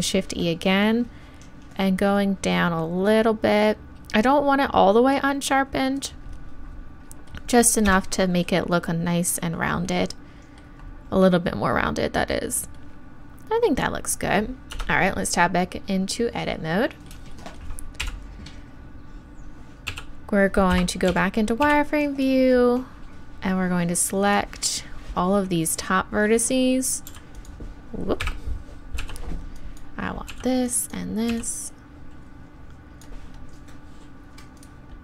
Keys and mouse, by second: 6.0-7.9 drag, 7.9 Tab, 14.7 Tab, 18.0 KP_1, 19.9 b, 21.1 z, 21.6 b, 29.0 b, 30.3 b, 34.6-35.0 drag.